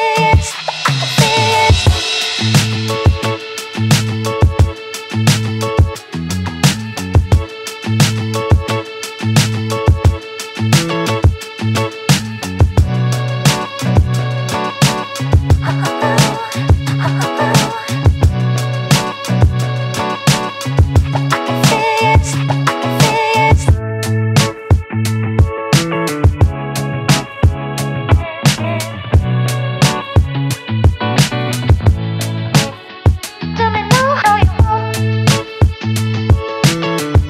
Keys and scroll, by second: 20.0 ctrl+d.